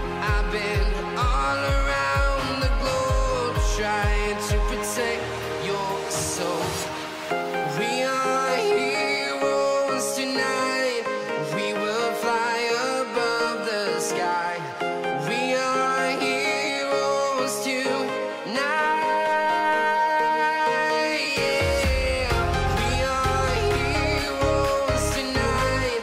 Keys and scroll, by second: 0.9 space, 2.0 ctrl+v, 4.2 ctrl+a.